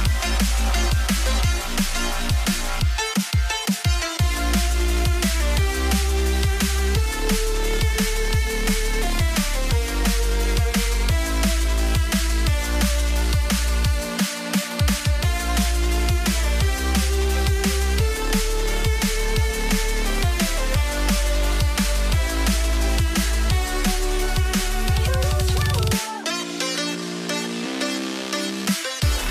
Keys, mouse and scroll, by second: 0.9 ctrl+click, 1.5 alt+scroll up 11, 2.1 ctrl+click, 3.0 alt+scroll down 10, 3.3 space, 4.2 ctrl+z, 4.4 ctrl+click, 4.9 alt+scroll up 13, 5.4 ctrl+click, 5.8-6.2 alt+scroll down 9, 6.4 ctrl+click, 7.2 space, 7.7 ctrl+click, 9.7 Return, 10.1 right click, 12.6 Return, 13.1 Return, 13.3 alt+scroll down 3, 14.6 ‖, 15.5 alt+Tab, 15.7 right click, 15.9 alt+Tab, 22.0 Return, 23.8 alt+scroll up 1, 24.7 right click, 25.2 alt+click, 26.1 ctrl+t, 27.6 shift+click, 28.3 Return.